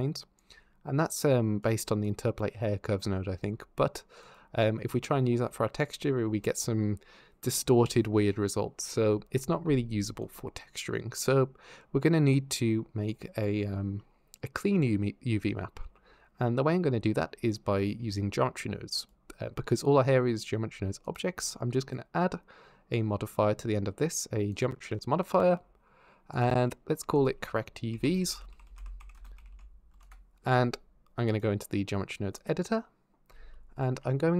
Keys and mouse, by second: 0.8 click, 1.8 click, 2.4 click, 4.0 ctrl+shift+click, 4.3 middle click, 10.0 click, 12.9 click, 15.6 x, 18.8 click, 20.9 click, 21.5-24.9 drag, 26.1 click, 27.1-29.9 shift+drag, 28.3 r, 31.1-32.3 drag.